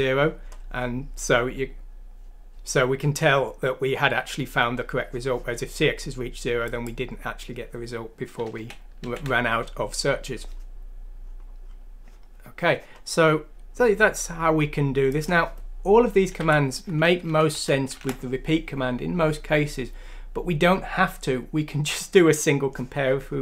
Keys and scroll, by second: 8.5 ctrl+z, 16.3 ;, 16.7 Down, 17.0 Down, 17.5 Left, 17.9 Delete.